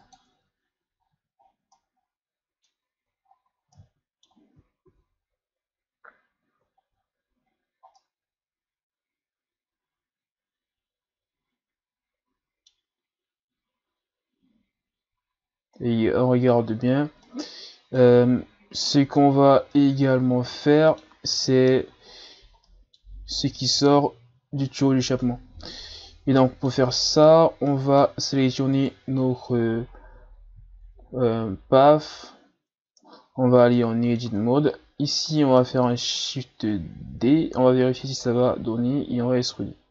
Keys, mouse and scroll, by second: 0.3 Tab, 0.8 a, 1.0-1.8 scroll down 8, 1.8-3.3 middle drag, 3.3-3.7 shift+scroll up 5, 3.7-4.9 middle drag, 4.9 ctrl+s, 6.7-7.4 shift+scroll up 2, 7.5-7.9 ctrl+scroll up 2, 8.0-11.0 middle drag, 13.0-13.4 scroll down 3, 13.8-14.6 scroll up 4, 17.2-18.5 middle drag, 18.5-19.2 scroll up 2, 19.2-19.7 scroll up 3, 19.7-22.2 middle drag, 22.2-22.7 scroll down 1, 22.7-24.8 middle drag, 24.8-25.2 scroll down 2, 25.2 middle click, 26.0-26.4 scroll up 4, 26.4 middle click, 26.9-27.3 ctrl+scroll up 6, 27.7-28.8 middle drag, 28.8 right click, 29.6-30.6 shift+scroll up 6, 30.7-31.1 scroll down 1, 31.1-31.9 shift+scroll up 3, 32.0 Tab, 32.6 Tab, 32.8 Tab, 33.4 shift+scroll down 5, 33.7 middle click, 34.4 shift+scroll down 2, 34.7-35.3 scroll up 4, 35.3 right click, 35.6-37.2 middle drag, 37.2 shift+d, 38.9 e.